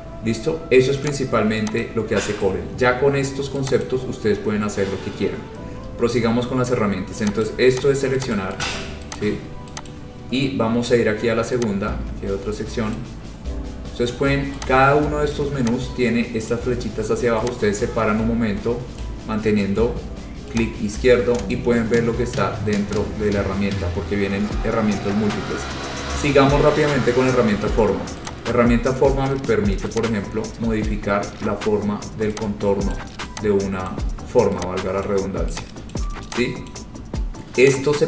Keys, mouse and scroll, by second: 1.2 click, 1.9 click, 4.0 click, 4.9 scroll, 7.6 click, 8.0 click, 8.6 click, 8.8 click, 9.3 click, 10.0 click, 13.1 click, 15.5 click, 16.6 click, 19.1 click, 21.6 click, 28.4 click, 31.0 click, 33.1 click, 34.1 click, 35.2 click, 36.1 click, 36.8 click.